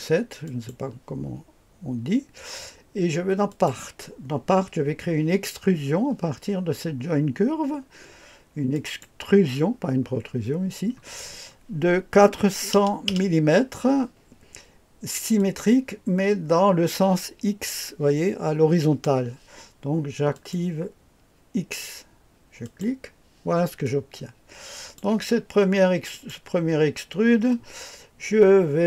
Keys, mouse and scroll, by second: 0.4 click, 3.5 click, 8.7 click, 12.4 KP_4, 12.7 KP_0, 13.1 KP_0, 15.4 click, 20.3 click, 22.6 click, 23.8-25.0 drag, 26.1 click.